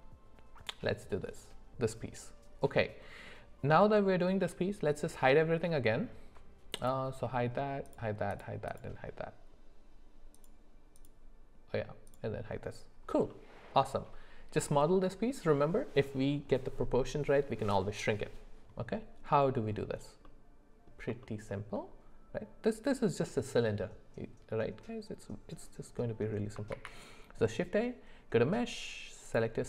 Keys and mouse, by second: 7.9 click, 8.3 click, 8.7 click, 10.4 click, 11.0 click, 12.1 click, 13.3 middle click, 20.2 middle click, 21.2 shift+middle click, 26.7 shift+a.